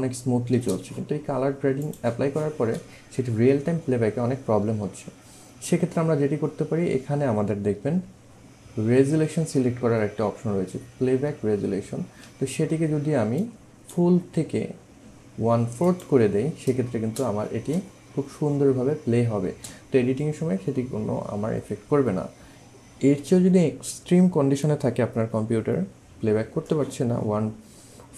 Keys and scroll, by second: 7.8 1, 12.2 1, 16.9 space, 19.4 space.